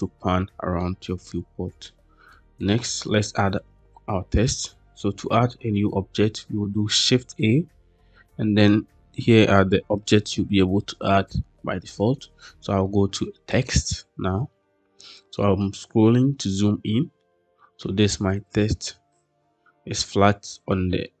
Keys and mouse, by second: 1.7-2.2 shift+middle drag, 2.5 middle click, 3.1 middle click, 7.0 shift+a, 16.3-17.7 middle drag, 20.9-21.2 middle drag.